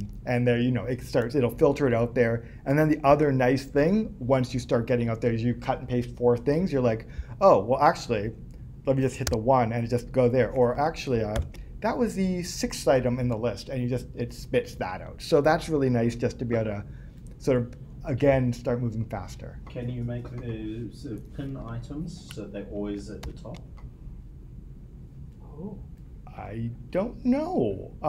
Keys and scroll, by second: 3.1 Escape.